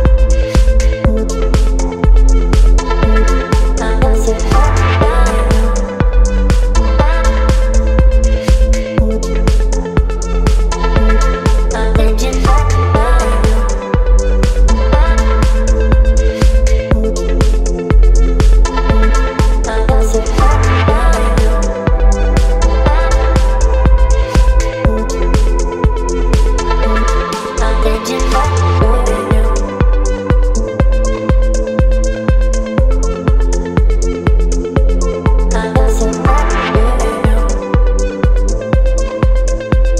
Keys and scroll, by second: 0.8 v, 1.7 space, 5.1 space, 11.3 space, 16.7 space, 24.5 v, 26.4 ctrl+t, 34.5 Return, 36.2 space.